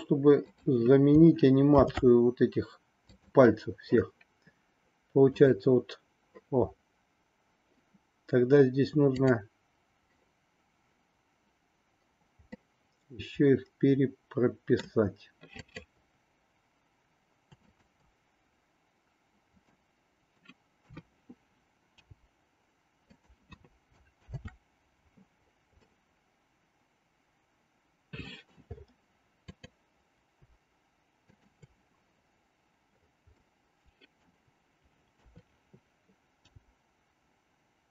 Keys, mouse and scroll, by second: 5.3 click, 9.2 click, 12.6-14.8 middle drag, 15.6-16.8 drag, 17.7-18.9 shift+drag, 19.7 middle click, 20.8 KP_3, 21.9 g, 24.2 ctrl+z, 25.9-28.5 middle drag, 29.4-30.8 drag, 33.4 middle click, 35.2 KP_3, 36.4 g.